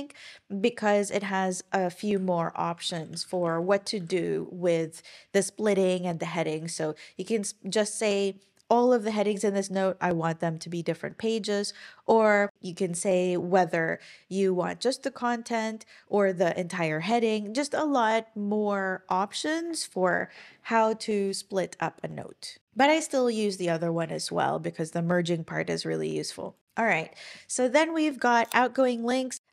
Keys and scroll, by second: 2.2 Escape, 2.9-4.1 typing, 24.1 super+,.